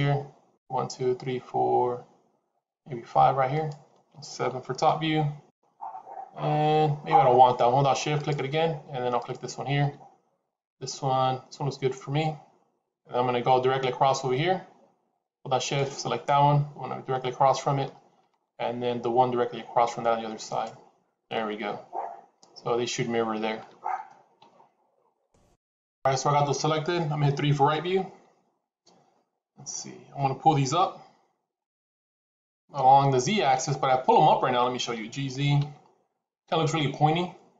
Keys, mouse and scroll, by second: 3.4 shift+click, 4.6 KP_7, 5.4 scroll down 2, 6.4-7.1 scroll down 1, 8.0 shift+click, 15.4 shift+click, 20.4 shift+click, 29.6 middle click, 30.6 KP_3, 31.5-32.7 scroll up 1, 32.7-33.1 scroll up 2, 34.6 g.